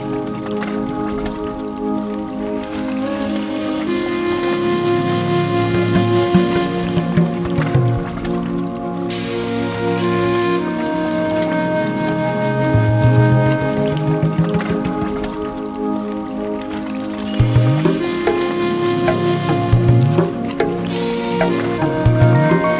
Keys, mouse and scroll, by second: 0.4 middle click, 0.5 middle click, 1.3 scroll, 1.4 click, 2.1 ctrl+c, 3.2 ctrl+v, 3.3 click, 4.0-5.1 scroll, 5.1 scroll, 6.1 click, 7.5 click, 9.0 click, 9.7 alt+middle click, 11.1 click, 11.6 alt+middle click, 12.5-12.8 scroll, 14.1 click, 15.5 click, 16.0 alt+scroll, 17.3 alt+middle click, 17.4 click, 19.6 alt+middle click, 19.7 alt+middle click, 19.9 click, 20.3 click, 20.5 alt+middle click, 20.8 click, 21.1 alt+middle click, 21.1-21.7 scroll, 21.9 click, 21.9 click, 22.1 click, 22.2 ctrl+k, 22.3 click, 22.4 scroll, 22.7 click.